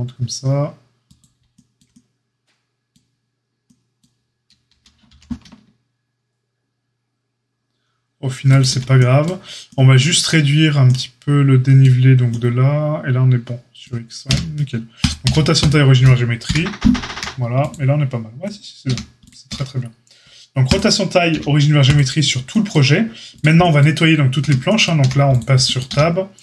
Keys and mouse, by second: 4.7 s, 14.2 q, 15.2 q, 16.4 KP_1, 17.0 a, 18.8 a, 19.4 q, 21.2 q, 24.3 Tab, 24.9 a, 25.8 q.